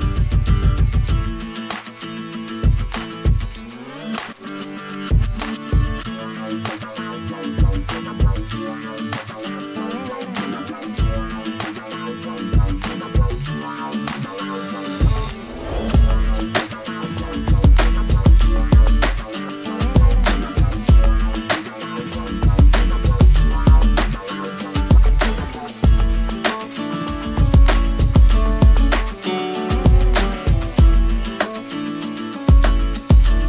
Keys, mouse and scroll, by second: 0.2-1.8 drag, 1.8 middle click, 2.3 click, 4.9 middle drag, 5.2-6.1 scroll down 2, 5.5 shift+a, 6.1 drag, 6.5 click, 6.7 shift+a, 8.5 KP_1, 8.7 g, 9.1 r, 9.6-10.4 drag, 10.7 g, 11.2 g, 11.7 KP_0, 13.2-15.9 drag, 15.1 KP_0, 15.9 middle click, 16.5 g, 17.1-18.9 drag, 19.2 click, 19.5 KP_0, 20.6 middle click, 21.0 r, 22.1-23.2 drag, 28.9-29.3 scroll up 9, 29.7-31.3 drag, 31.6 click, 33.2 middle click.